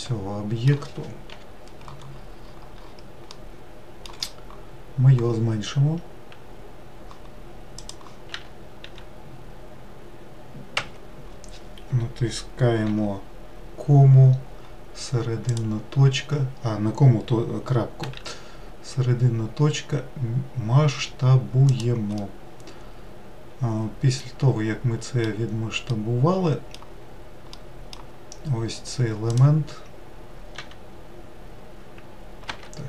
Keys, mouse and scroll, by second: 1.4 KP_Decimal, 2.1-3.4 scroll down 13, 3.4-6.4 middle drag, 7.8 click, 8.4 a, 8.9 s, 12.9 ., 18.1 s, 22.2-25.3 middle drag, 26.0-29.4 middle drag, 29.4 click, 30.6 e.